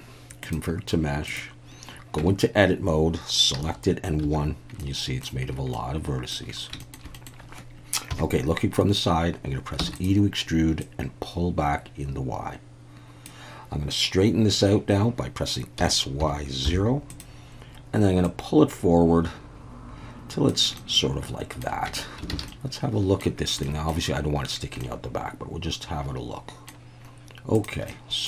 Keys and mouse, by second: 2.2 Tab, 3.6 a, 4.2 1, 4.8 middle click, 5.7 middle click, 6.8 shift+middle click, 7.1 middle click, 8.1 KP_3, 9.8 e, 9.9 click, 10.8-13.2 drag, 15.8 s, 16.2 y, 16.6 0, 17.1 click, 18.3-20.5 drag, 20.8 middle click, 21.9 Tab, 22.3 alt+a, 22.5-23.2 middle drag, 23.6 middle click, 24.8-26.7 middle drag, 27.6 drag, 27.9-28.2 middle drag.